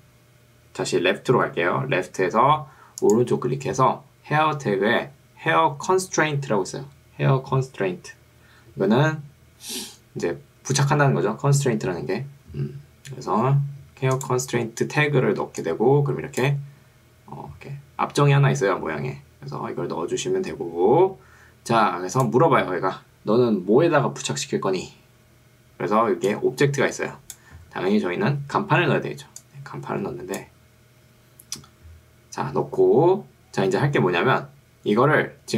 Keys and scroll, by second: 15.3 ctrl+2, 19.7 Escape, 26.1 ctrl+2, 27.7 Escape.